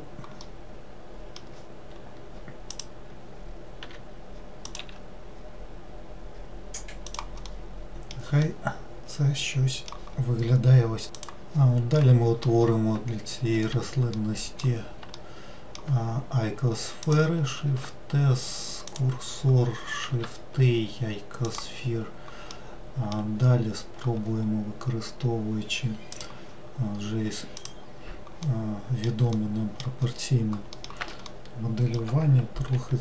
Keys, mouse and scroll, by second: 2.7 click, 3.8 e, 4.8 s, 7.5-11.3 middle drag, 12.1-13.7 middle drag, 13.7 1, 14.2-17.1 middle drag, 17.1 click, 17.7 shift+s, 20.1 shift+a, 22.6-25.6 middle drag, 26.2 click, 27.6 click, 28.5-32.8 middle drag, 32.8 g.